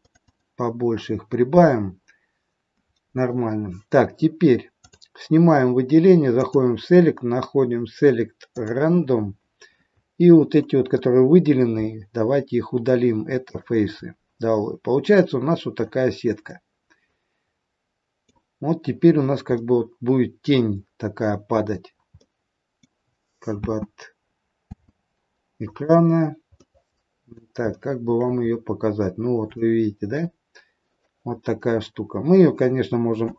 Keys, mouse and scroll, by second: 0.0 click, 0.3 click, 4.7 click, 6.3 click, 10.8 Delete, 14.7 scroll up 4, 15.1 middle click, 15.9 scroll down 4, 16.3 middle click, 19.1 scroll down 2, 19.4 middle click, 22.1 middle click, 23.7 space, 24.7 space, 25.6 click, 26.6 middle click, 26.6 scroll up 1, 27.7 shift+middle click, 28.5-29.4 scroll up 7, 29.4 shift+middle click, 31.3-31.8 scroll down 8, 33.2 a.